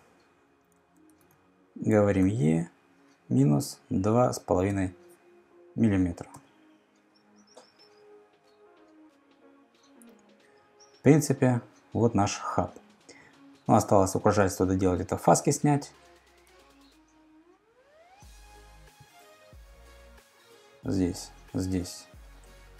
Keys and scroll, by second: 1.2 super+Tab, 2.2 e, 3.8-4.8 typing, 6.3 Return, 13.6 super+Tab, 16.6 super+Tab, 22.2-22.7 typing.